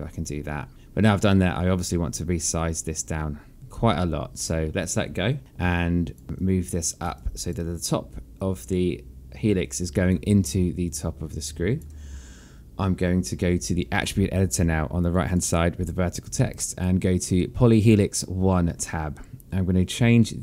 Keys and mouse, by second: 6.2 alt+click, 6.4 alt+click, 7.8 alt+click, 9.1 click, 10.9 alt+click, 15.8 click, 18.4 click.